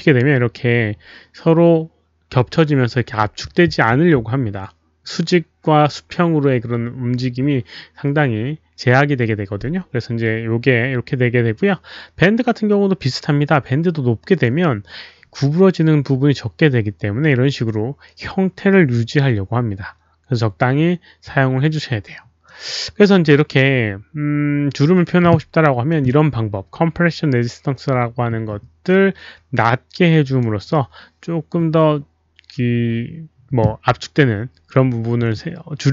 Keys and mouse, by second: 14.3 click, 22.5 click, 25.8 click, 28.9 click, 33.2 click.